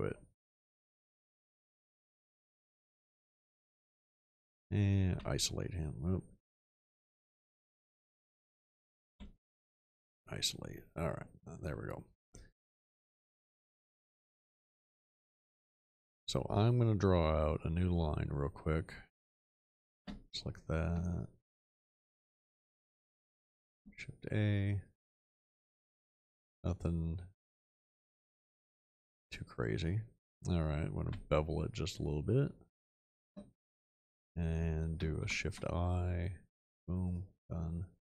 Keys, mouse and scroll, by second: 5.1 ., 6.5 ctrl+z, 9.1 ., 20.0 space, 23.8 shift+a, 31.0 b, 35.3 shift+i.